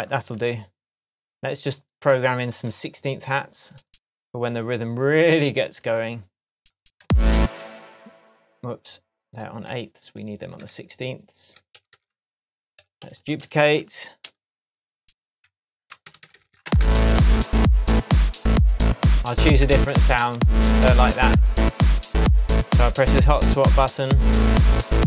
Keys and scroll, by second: 0.0 Down, 7.0 space, 10.6 super+d, 13.0 shift+super+d, 16.0 super+d, 16.6 super+space, 16.9 super+d, 19.7 super+d, 21.0 shift+super+d, 21.1 shift+super+Tab, 21.8 shift+Tab.